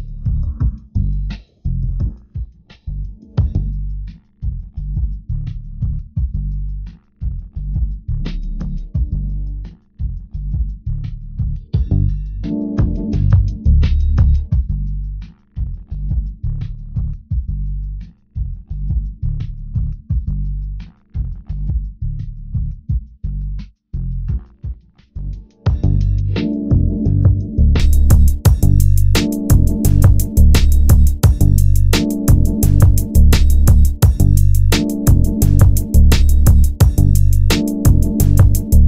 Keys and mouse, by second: 12.4 ctrl+Tab, 16.6 e, 20.4-21.4 drag, 26.4 ctrl+Tab, 27.0 ctrl+Tab, 29.0 g, 30.8-32.0 drag, 32.0 g, 32.7 middle click, 35.9-37.9 middle drag, 35.9 g, 38.5 g.